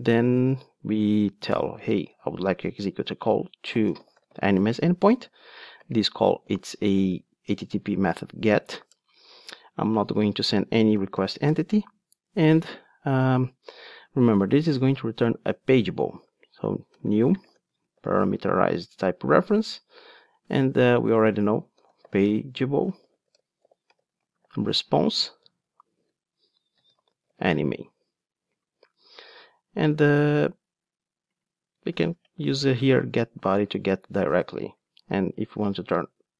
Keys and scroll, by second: 7.6 Return, 19.2 Return, 25.7 Return, 32.5 Return, 35.0 Tab.